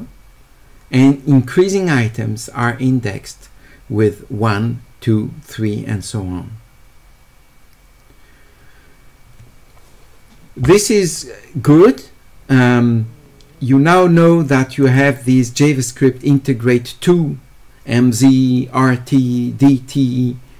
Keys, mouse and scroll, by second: 14.8 click.